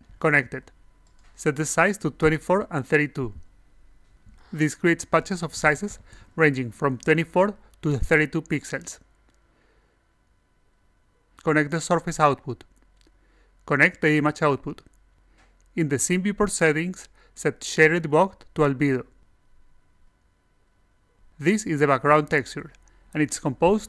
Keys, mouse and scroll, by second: 0.1 click, 1.9 click, 10.9-12.3 drag, 13.2 click, 13.5-14.5 drag, 16.4 click, 17.8 click, 18.7 click, 20.4 click, 21.4 click, 23.0 click.